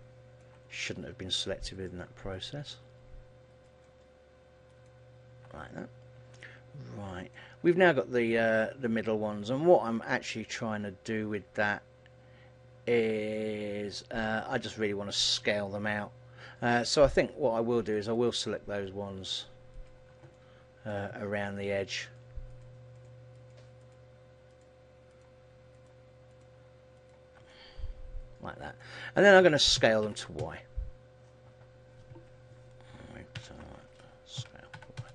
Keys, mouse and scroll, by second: 0.7-1.3 scroll up 3, 1.9 shift+right click, 2.5 shift+right click, 5.0 shift+right click, 5.7-6.4 scroll down 1, 6.4 middle click, 6.4-6.9 scroll down 2, 7.8-8.3 scroll up 3, 8.9 middle click, 13.5 shift+middle click, 18.2 shift+right click, 19.4 shift+right click, 20.4 shift+right click, 20.4 shift+middle click, 21.7 shift+right click, 22.4 shift+right click, 22.5 shift+right click, 23.1 shift+right click, 23.5 shift+right click, 23.9 shift+right click, 24.7 shift+right click, 25.2 shift+right click, 26.1 shift+right click, 26.4 shift+right click, 27.1 shift+right click, 27.6 middle click, 29.9 s, 33.5 alt+o, 34.5 s.